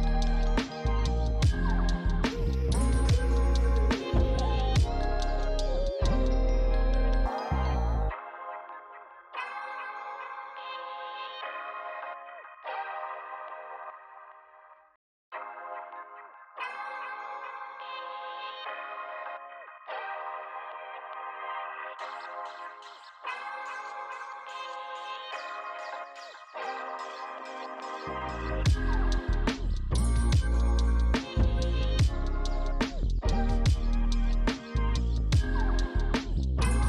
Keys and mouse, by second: 0.1 right click, 0.3 click, 1.9 click, 5.0 shift+click, 6.5 ctrl+z, 7.5 click, 9.1 click, 10.0 click, 10.5 f, 10.6 click, 10.9 f, 11.0 click, 13.3 alt+q, 13.3 alt+click, 16.2 f, 16.3 click, 16.4 f, 16.5 click, 18.2 f, 18.3 click, 18.7 f, 18.8 click, 19.1 f, 20.2 click, 21.0 click, 23.1 click, 25.9 alt+click, 26.3 click, 27.3 shift+click, 28.1 g, 28.3 click, 28.7 shift+click, 29.6 f, 29.7 click, 30.6 click, 31.9 click, 32.2 shift+click, 34.7 f, 34.7 click.